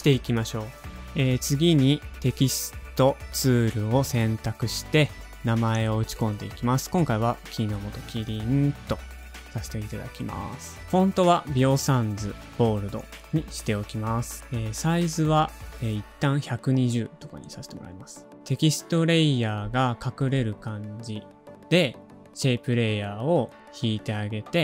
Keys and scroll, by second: 0.0 super+n, 0.0 super+v, 0.0 alt+/, 4.5-8.7 typing, 9.3 alt+super+Home, 14.0 alt+super+Home, 14.0 shift+n, 15.4-16.5 typing, 17.1 alt+super+Home, 19.1 shift+super+a.